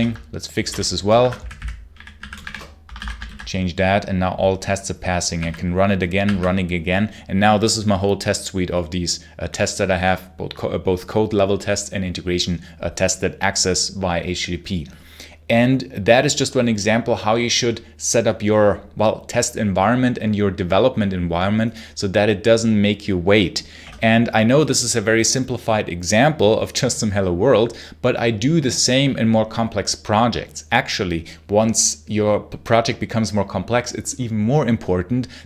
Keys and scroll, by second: 0.0-3.1 typing, 2.8 ctrl+s, 5.2 r, 6.1 r.